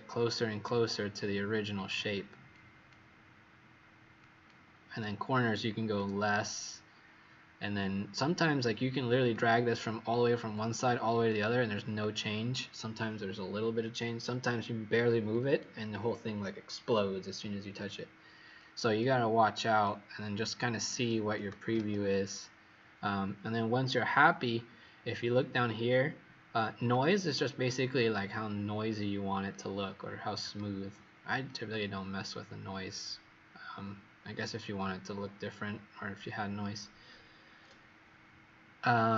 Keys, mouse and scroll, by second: 0.3-0.7 alt+scroll up 4, 1.1 alt+scroll down 1, 4.1 click, 21.7 ctrl+0, 24.9 alt+scroll up 1, 26.8 click, 34.1-35.1 alt+scroll up 2, 35.1-36.3 scroll up 2.